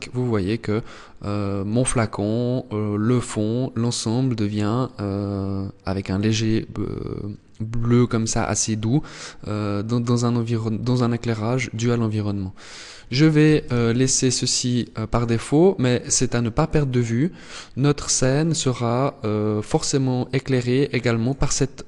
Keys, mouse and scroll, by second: 11.8 click, 14.1 click.